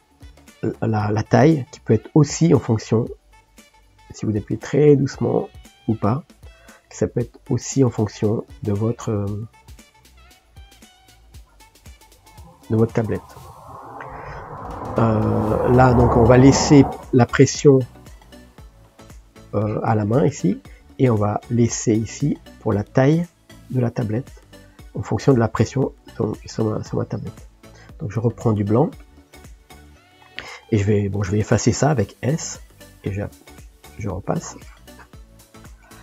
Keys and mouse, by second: 4.5-8.1 drag, 9.6 click, 10.9-14.7 drag, 18.4 click, 18.9 click, 19.6-24.1 drag, 24.1-25.6 middle drag, 25.6-28.7 drag, 32.7-35.3 drag, 35.3-36.0 middle drag.